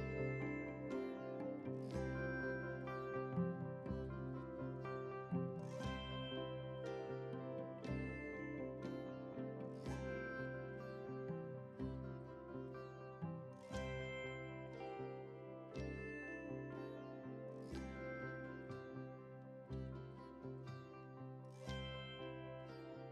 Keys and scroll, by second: 4.8 ctrl+t.